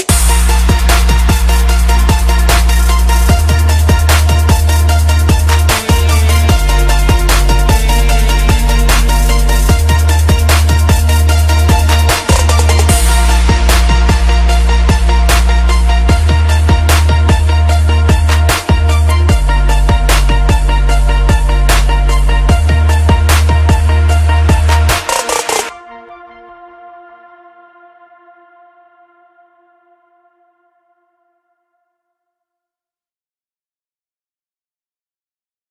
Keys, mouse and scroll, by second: 7.0 F10, 7.3 right click, 8.2 click, 8.7-10.8 typing, 8.9 click, 11.0 Return, 12.2-14.0 drag, 14.2 ctrl+c, 14.4 ctrl+v, 14.9 click, 15.9 ctrl+v, 16.4-21.7 drag, 23.5 ctrl+v, 24.1-27.4 drag.